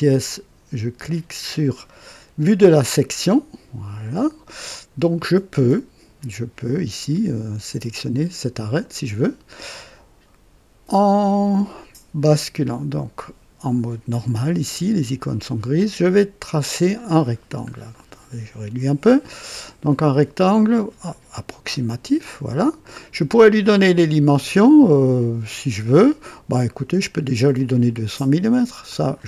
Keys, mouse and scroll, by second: 2.7 click, 12.6 click, 15.7 click, 17.4 scroll down 2, 17.9 right click, 20.6 click, 22.0 click, 22.6 right click, 25.7 right click, 26.6 right click, 27.5 click, 28.8 click.